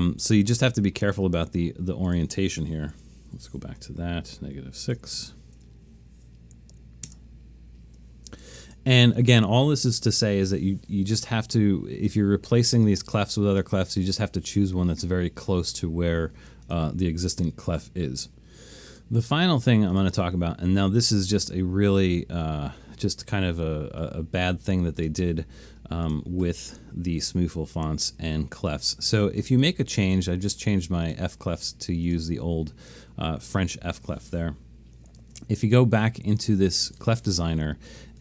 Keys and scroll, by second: 3.0 BackSpace, 3.3 0, 3.8 Tab, 5.0 -, 5.6 Tab, 35.2 alt+super+a.